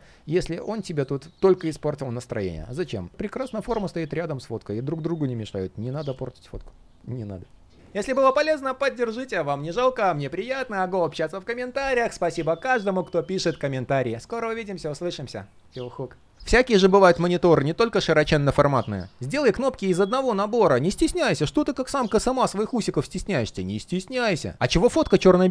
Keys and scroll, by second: 5.3 super+z.